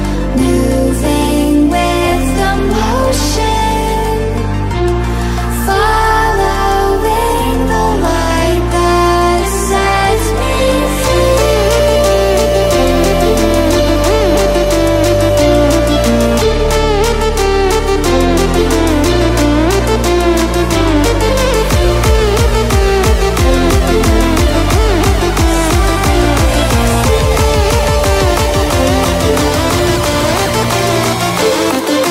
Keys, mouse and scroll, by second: 0.2-0.5 alt+scroll down 2, 1.1 ctrl+0, 1.6 v, 1.9-3.4 drag, 4.6 i, 5.3 click, 6.9 v, 7.2 click, 10.4-11.1 drag, 12.0 ctrl+g, 13.2 click, 15.8 l, 17.8-19.9 alt+shift+drag, 27.2 v, 29.2 alt+click, 29.2-32.1 alt+drag.